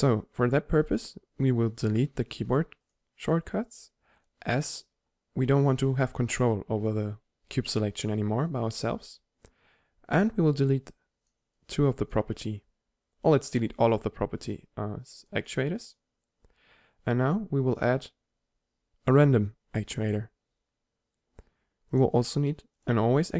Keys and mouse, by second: 2.5-5.2 drag, 10.9-13.4 drag, 13.6-17.8 drag, 19.4 click.